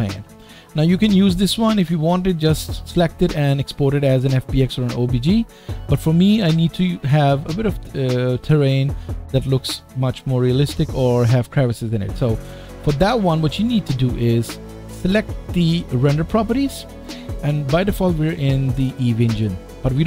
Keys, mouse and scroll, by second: 2.8 click, 5.0 click, 10.5 click, 14.2 click, 16.1 click, 16.2-20.0 middle drag.